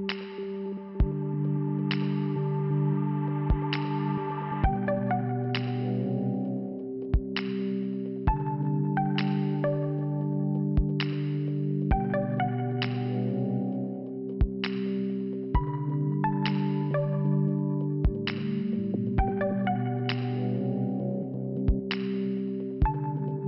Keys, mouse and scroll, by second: 0.4 click, 0.5 click, 1.9 click, 2.1 click, 3.4 right click, 3.6 right click, 4.4 right click, 4.7 right click, 5.1 click, 5.3 click, 5.4 click, 5.5 click, 6.7 middle click, 8.5 click, 9.7 scroll up 2, 11.2 click, 11.4 click, 13.0 click, 13.0 click, 14.3 click, 14.4 click, 16.1 click, 19.6 click, 19.7 click, 21.4 click.